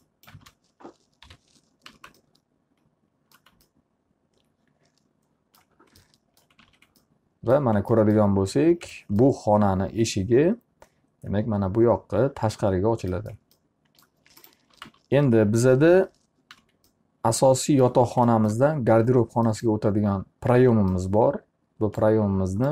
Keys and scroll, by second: 1.8 p, 2.4 z, 6.8 alt+a, 14.8 t, 15.4 z, 16.5 p, 17.1 z.